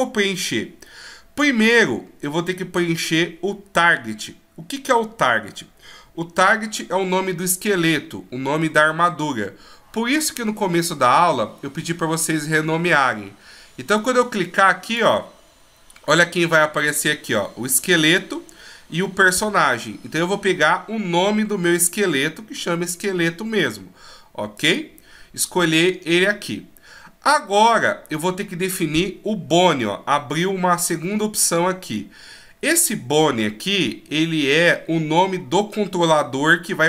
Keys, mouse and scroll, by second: 14.8 click.